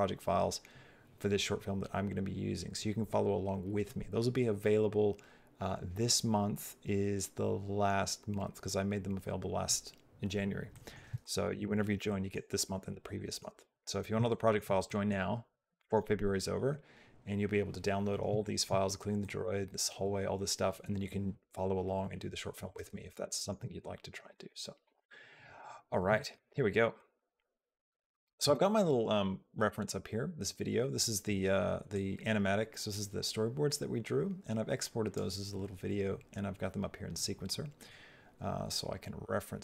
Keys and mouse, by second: 10.5 middle click, 11.0 shift+middle click, 12.0 shift+middle click, 13.0 middle click, 14.1 shift+middle click, 14.7 middle click, 15.5 middle click, 18.2 shift+middle click, 19.1 middle click, 23.0 shift+middle click, 24.1 shift+middle click, 26.0 shift+middle click, 26.8 middle click, 27.2 shift+middle click, 31.7-35.0 drag, 37.7-39.6 drag.